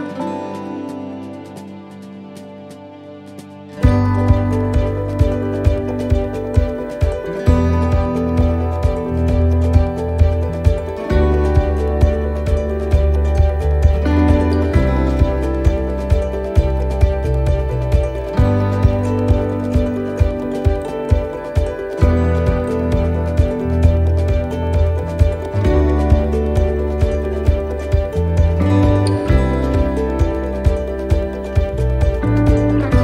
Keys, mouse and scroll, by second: 1.7 ctrl+r, 7.6 click, 8.5 right click, 9.4 shift+right click, 10.6 x, 13.1 middle click, 13.5 scroll up 1, 14.6 click, 14.6-14.9 scroll up 1, 15.5 right click, 16.4 shift+right click, 17.4 f, 19.3 right click, 19.3 right click, 20.4 shift+right click, 20.5 shift+right click, 21.3 g, 22.9 f, 24.4 right click, 25.5 shift+right click, 26.5 f, 27.0 middle click, 28.2 shift+middle click, 29.1 right click, 30.1 shift+right click, 31.1 right click.